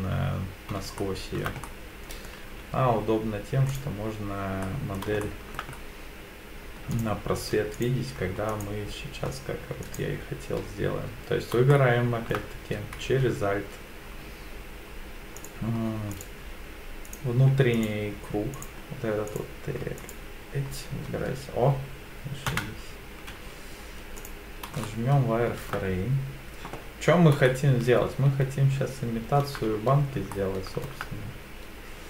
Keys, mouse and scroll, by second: 1.0 shift+middle click, 1.6 middle click, 2.5 z, 4.6 middle click, 5.2 shift+middle click, 5.7-6.7 scroll up 2, 6.9 alt+click, 7.8 click, 8.5 alt+click, 9.8 alt+click, 11.7 shift+middle click, 15.4 alt+click, 16.1 click, 17.1 click, 17.7 alt+click, 18.6 alt+click, 19.3 click, 20.0 alt+click, 22.5 KP_1, 23.3 z, 24.8 shift+middle click, 27.0-27.4 scroll down 2, 27.5-29.4 shift+middle drag, 30.3 shift+middle click.